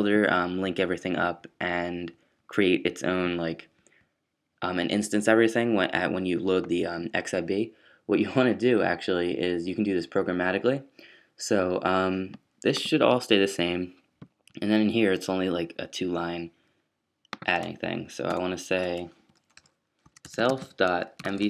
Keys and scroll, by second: 19.1 fn+Up, 19.5 fn+Up, 20.0-21.4 typing.